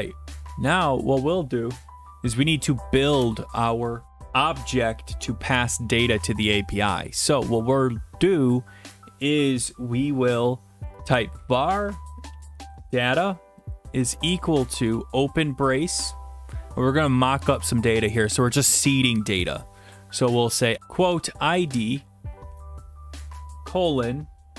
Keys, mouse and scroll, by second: 1.9 click, 3.2 Return, 10.8 typing, 12.3-12.7 typing, 14.0-15.1 typing, 16.2-17.3 scroll, 17.3 scroll, 20.7-23.0 typing.